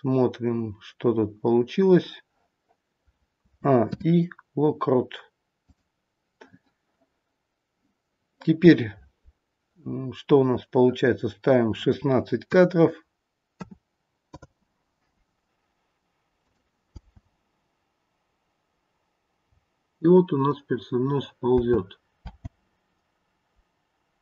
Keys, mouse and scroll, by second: 3.3 a, 3.7 i, 11.6 click, 16.5 click, 16.9 space, 19.4-19.9 scroll down 4, 21.6 space, 22.1 space.